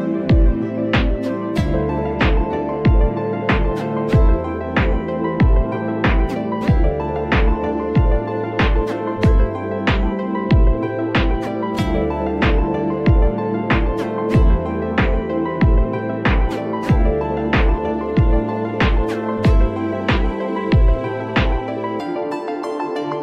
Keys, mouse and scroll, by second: 0.9 alt+click, 1.6-4.9 drag, 6.2 click, 7.6 alt+click, 9.1-11.2 drag, 11.9-12.9 scroll down 5, 12.9 Tab, 13.2-13.5 scroll down 1, 13.5-14.0 scroll up 2, 14.0 click, 16.1-18.1 drag, 18.1 n, 20.3-23.2 drag.